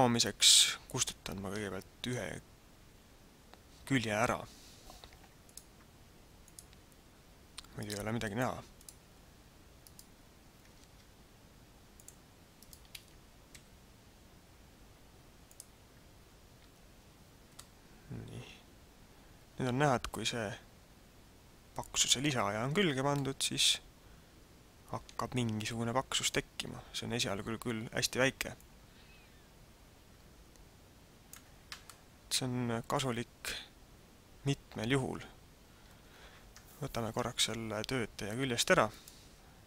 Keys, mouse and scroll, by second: 5.4 click, 6.7 click, 7.7 click, 9.8 right click, 10.7 ctrl+Tab, 12.6 right click, 13.5 x, 16.4 scroll up 2, 17.0 Tab, 17.5 middle click, 23.1 middle click, 28.6 click, 31.9 middle click, 38.9 click.